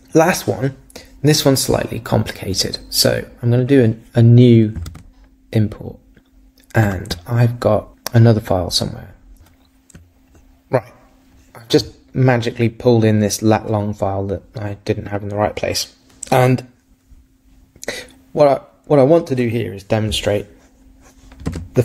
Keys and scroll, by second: 4.9 super+Tab.